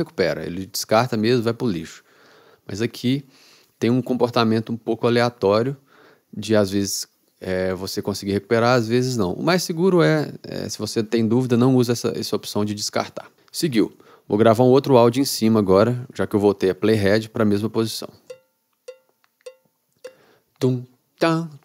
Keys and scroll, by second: 18.4 r.